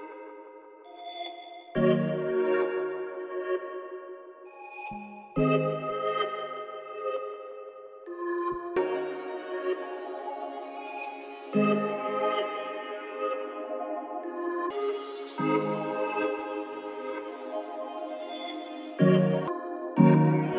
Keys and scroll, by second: 1.1 4, 8.7 ctrl+l.